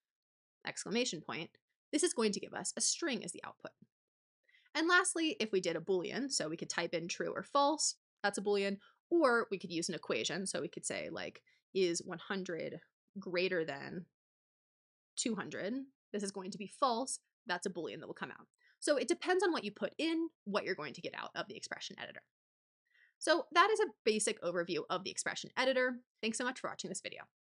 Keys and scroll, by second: 0.0-0.1 typing, 4.3 BackSpace, 6.1-7.1 typing, 7.7 Return, 8.6 BackSpace, 11.6-15.5 typing.